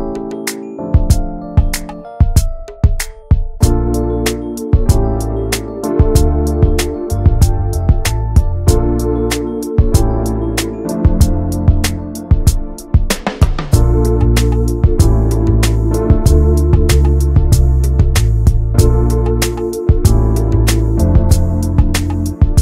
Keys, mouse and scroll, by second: 0.2 click, 0.3 scroll down 2, 0.5 middle click, 0.7 ctrl+s, 1.0 scroll down 1, 1.2 middle click, 2.1 scroll up 1, 2.3 ctrl+s, 2.4 middle click, 3.0 click, 3.2 ctrl+a, 3.5 middle click, 3.7 ctrl+s, 3.9 click, 5.2 ctrl+s, 5.5 click, 5.7 Tab, 5.9 middle click, 6.0-6.6 scroll up 2, 6.2 shift+middle click, 6.7 middle click, 6.8 2, 7.3 click, 7.8 alt+shift+click, 8.2 middle click, 8.3-8.7 scroll up 1, 8.7 ctrl+b, 11.1 shift+middle click, 11.9 Tab, 12.1 click, 12.3 scroll down 3, 12.5-13.5 shift+middle drag, 13.5 ctrl+z, 13.8 ctrl+z, 14.5 middle click, 15.1 scroll up 2, 15.8 alt+shift+click, 16.4 ctrl+z, 16.7 alt+shift+click, 17.0 scroll down 3, 17.2-18.5 middle drag, 18.5 scroll up 1, 19.1 ctrl+b, 22.5 Tab.